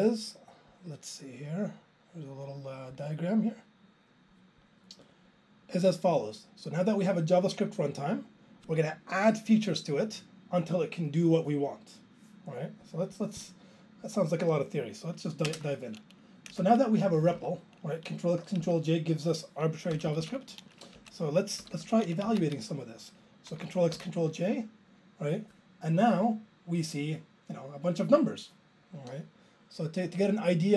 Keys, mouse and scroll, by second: 15.5 alt+space, 16.6 Return, 17.2 Up, 17.3 Up, 18.6 Down, 19.9 ctrl+k, 20.1 ctrl+k, 20.2 ctrl+k, 21.0 Up, 21.6 ctrl+k, 21.7 ctrl+k, 22.3 Down, 22.4 Left, 26.0 ctrl+j.